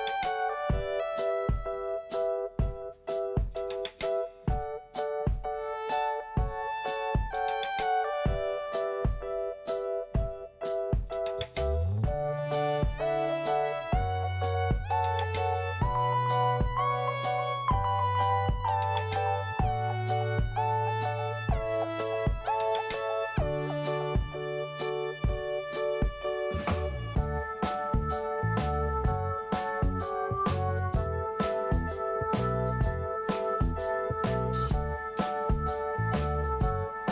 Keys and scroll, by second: 0.0 Return, 0.9 2, 1.1 Return, 4.0 BackSpace, 4.1 7, 4.2 Return, 9.0-10.8 typing, 10.9 Return, 12.8 c, 17.9 Left, 18.2 6, 18.2 Return, 19.8 ctrl+s, 27.6 f, 30.5 alt+q, 32.9 alt+r, 33.2 Delete, 33.8 alt+r, 34.0 Delete, 34.7 alt+r, 35.0 Delete, 35.9 alt+r, 36.1 Delete, 36.6 e.